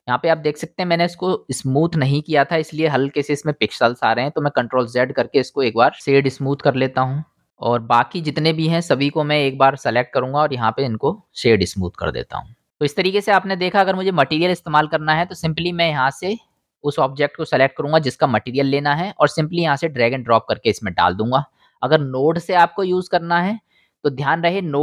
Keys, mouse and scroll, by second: 4.6 ctrl+z, 5.3 middle click, 5.6-7.1 drag, 7.3-9.0 drag, 9.0 middle click, 9.1-9.5 drag, 9.5-10.6 middle drag, 10.1-10.6 drag, 10.1-10.6 right drag, 11.5-12.0 drag, 11.5-12.8 middle drag, 11.5-12.0 right drag, 12.8-24.8 drag.